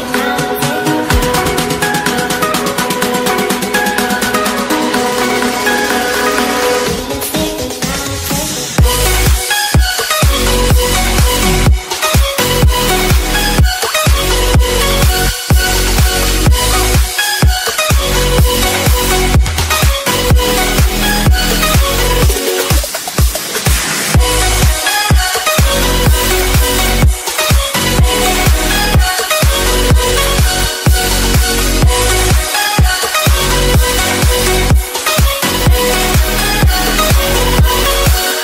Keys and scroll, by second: 4.1 ctrl+space, 17.7 ctrl+a, 25.9 ctrl+a, 27.2 ctrl+space, 35.4 ctrl+e, 36.6 ctrl+space, 37.1 ctrl+g.